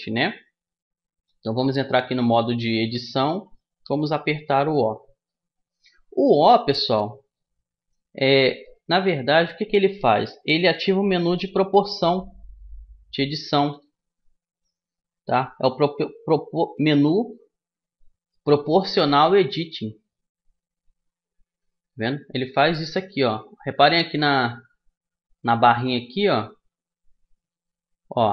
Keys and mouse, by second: 1.4 Tab, 3.8 o, 5.3-6.3 middle drag, 7.8-10.5 middle drag, 19.1 o, 21.5 o, 22.3 o, 23.3 o, 24.5 o, 27.5 o.